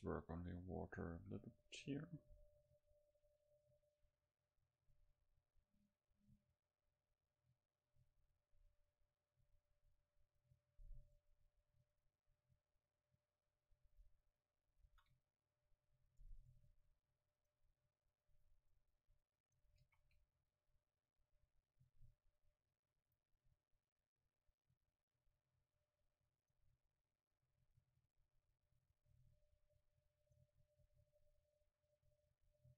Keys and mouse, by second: 1.3 a, 1.5-7.2 middle drag, 5.8-8.6 drag, 9.5-11.2 drag, 14.9 shift+a, 18.3-21.7 drag, 20.8 shift+a, 23.9-26.4 drag, 28.2-32.5 drag, 32.5-32.7 middle drag.